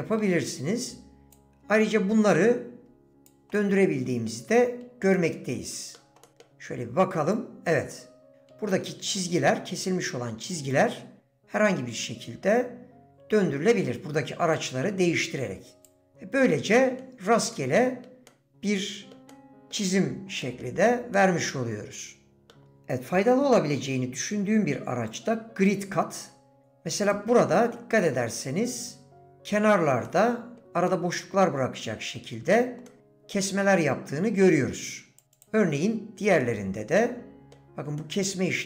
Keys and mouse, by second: 3.0 click, 3.6 middle click, 5.1 middle click, 5.5 click, 6.2 click, 8.1 click, 8.7 middle click, 11.7-13.1 drag, 15.2 click, 16.0 middle click, 16.8 middle click, 17.5 middle click, 18.3 middle click, 19.3 middle click, 20.4 middle click, 21.1-22.5 drag, 30.1 middle click, 30.9-32.2 middle drag, 32.9 middle click, 36.4-37.5 middle drag, 38.0-38.6 middle drag.